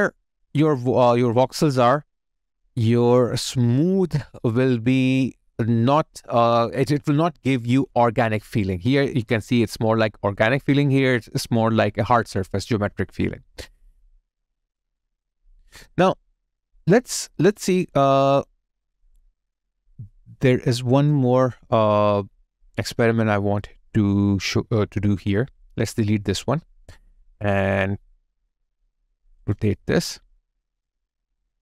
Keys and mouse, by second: 0.2 alt+middle click, 16.7 alt+right click, 17.9 alt+click, 18.6 alt+right click, 19.2 alt+click, 21.1 double click, 25.6 Delete, 27.6 Delete, 28.3 ctrl+click.